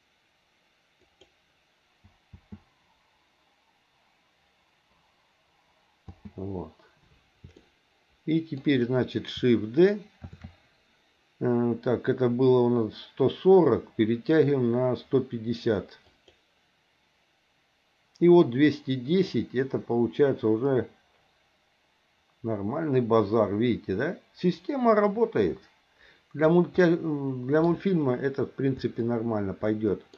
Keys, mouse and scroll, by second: 2.3 space, 6.0 space, 7.6 shift+middle click, 10.3 shift+d, 19.3-26.5 drag, 26.8 middle click, 29.1-30.1 shift+middle drag.